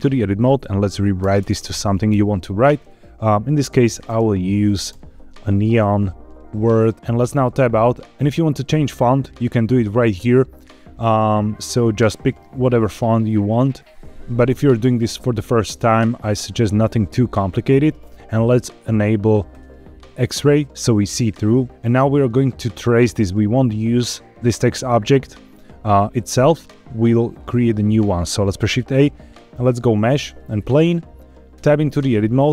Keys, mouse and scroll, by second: 1.1 BackSpace, 1.3 BackSpace, 1.5 BackSpace, 2.0 BackSpace, 3.6 shift+n, 4.0 shift+e, 4.1 shift+o, 4.8 shift+n, 7.1 Tab, 8.0 click, 9.2 click, 10.5 scroll down 1, 19.4 click, 21.3 scroll up 1, 21.7 scroll down 1, 28.3 shift+a, 31.7 Tab.